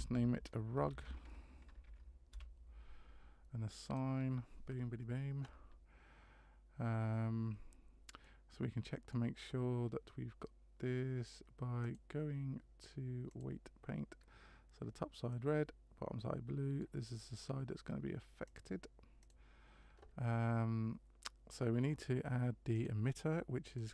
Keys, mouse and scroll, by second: 3.8 click, 8.2 middle click, 11.8 click, 15.3 middle click, 18.5 click, 22.7 click, 23.7 click.